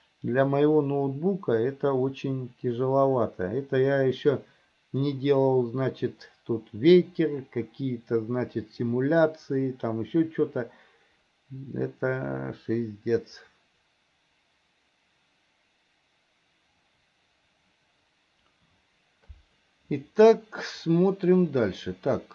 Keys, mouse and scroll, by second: 13.7-18.0 drag, 20.9 middle click.